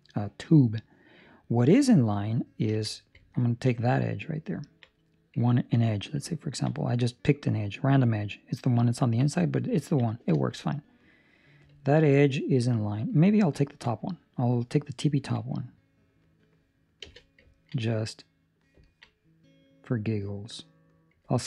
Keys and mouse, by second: 3.1 2, 3.3 ctrl+middle click, 4.1 right click, 4.6 ctrl+middle click, 4.9 middle click, 5.4 ctrl+middle click, 5.8 middle click, 6.2 ctrl+middle click, 7.1 middle click, 8.9 ctrl+middle click, 9.2 middle click, 9.7 ctrl+middle click, 10.5 shift+middle click, 10.9 middle click, 11.7 ctrl+middle click, 12.1 middle click, 13.5 ctrl+middle click, 13.9 middle click, 15.1 ctrl+middle click, 15.4 middle click, 16.9 z, 17.4 ctrl+middle click, 18.4 right click, 18.8 ctrl+middle click, 19.0 middle click, 21.2 ctrl+middle click.